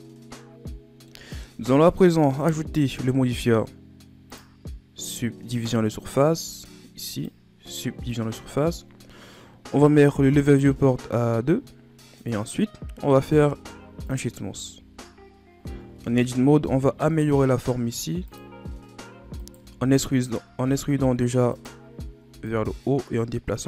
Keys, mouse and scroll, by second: 1.5 Tab, 2.1-4.3 middle drag, 4.3 click, 5.5-8.5 drag, 10.5-13.3 drag, 13.3 w, 14.9-15.5 shift+scroll up 5, 15.8 Tab, 17.1 ctrl+Tab, 18.7-19.4 scroll up 1, 19.4 alt+right click, 20.0-20.6 ctrl+scroll up 1, 20.6 e, 22.5-23.6 drag.